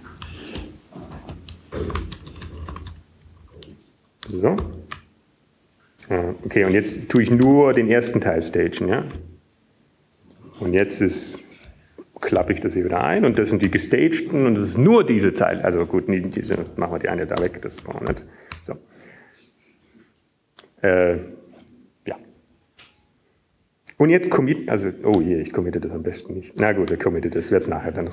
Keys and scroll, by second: 1.6 Up, 3.2 Down, 3.2 BackSpace, 4.1-4.7 Up, 4.4-8.2 typing, 10.2-10.8 typing, 12.8 typing, 15.8-16.9 typing, 19.5 typing, 21.4 ctrl+space, 26.7 typing.